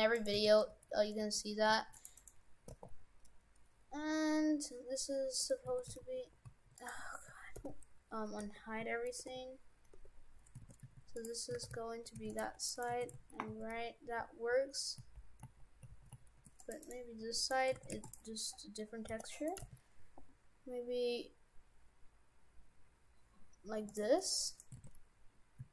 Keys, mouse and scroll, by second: 0.2 right click, 0.4 shift+f, 2.2 right click, 2.7 r, 5.7 shift+f, 7.6 alt+h, 8.4 Tab, 9.3 alt+h, 9.9 Tab, 10.6 shift+f, 11.6 shift+f, 12.4 Tab, 12.7 right click, 12.9 shift+f, 16.8 right click, 17.2 Tab, 17.4 right click, 17.8 shift+f, 18.5-19.0 scroll down 3, 19.0-19.6 scroll down 1, 19.0 g, 19.6 g, 24.5 right click, 24.8 shift+f.